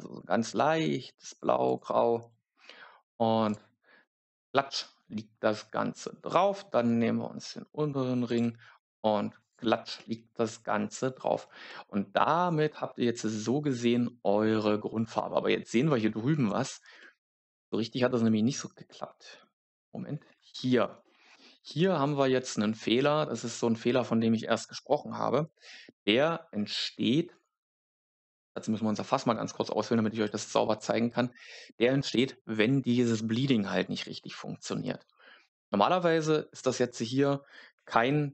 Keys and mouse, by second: 1.2 click, 1.6 click, 3.4 click, 8.2 click, 9.3 click, 13.3 middle click, 28.4 click, 33.7 middle click.